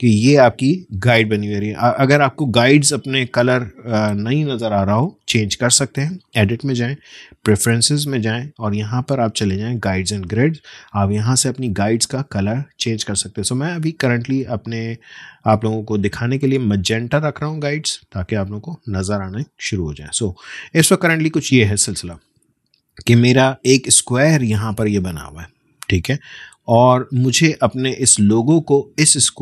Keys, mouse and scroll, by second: 6.2 click, 12.8 click, 16.6 click, 18.9-19.6 alt+scroll down 1, 20.8-21.4 alt+scroll up 1, 27.2-29.4 drag.